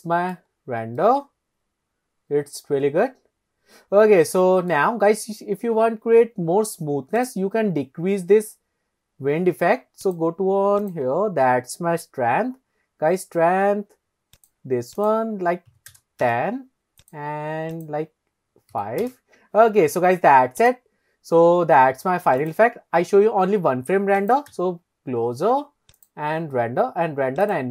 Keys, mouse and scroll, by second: 0.4 scroll up 1, 0.5-1.0 scroll down 2, 1.0-4.7 middle drag, 5.6-6.2 scroll up 2, 6.4-7.2 scroll down 2, 7.2 click, 10.1 click, 10.8 click, 14.4 click, 15.0 click, 17.0 click, 17.8-19.2 drag, 20.6 drag, 22.4 click, 24.3 click, 24.5 KP_0, 26.0-27.7 drag.